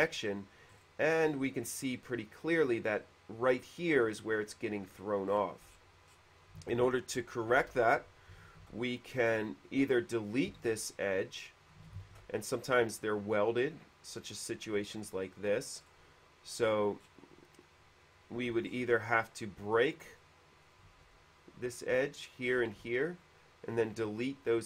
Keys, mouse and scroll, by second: 0.3 middle click, 0.9 middle click, 5.1 middle click, 5.5 middle click, 5.9 middle click, 6.2 middle click, 8.8 ctrl+d, 10.8 shift+e, 11.1 click, 12.0 ctrl+z, 13.6 ctrl+z, 13.6 ctrl+d, 13.6 shift+e, 14.6 middle click, 15.0 middle click, 15.9 middle click, 16.8 middle click, 18.7 o, 18.8 middle click, 20.2 click, 20.8 click, 21.8 click, 22.6 click, 22.8-23.5 typing, 23.2 click.